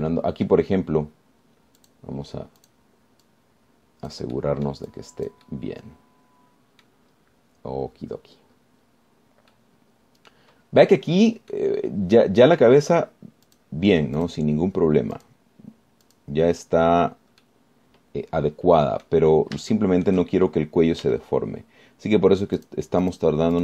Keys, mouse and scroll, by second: 1.7 scroll up 1, 3.0 click, 3.8 click, 4.5-6.1 drag, 6.7 scroll down 2, 8.3-8.8 scroll up 2, 9.1-9.7 scroll up 4, 9.7-10.3 scroll down 2, 10.7-11.7 drag, 11.7-12.4 scroll up 4, 12.7 click, 13.4 middle click, 14.7 click, 15.4 click, 16.4 click, 17.3 click, 18.7-20.5 middle drag, 20.9 shift+click, 22.3 z.